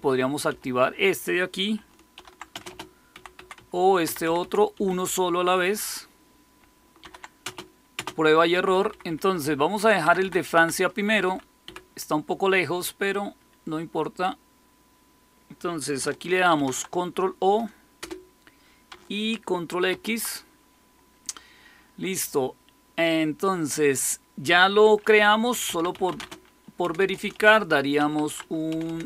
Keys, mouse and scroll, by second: 0.0-5.2 typing, 6.9-12.1 typing, 16.5 ctrl+o, 17.9 Return, 19.8 ctrl+x, 25.3-29.0 typing.